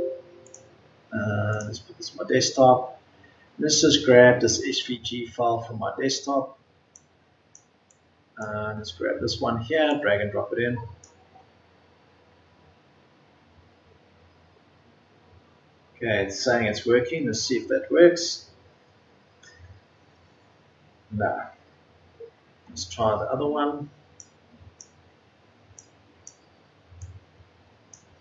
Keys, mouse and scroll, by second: 25.2 Delete.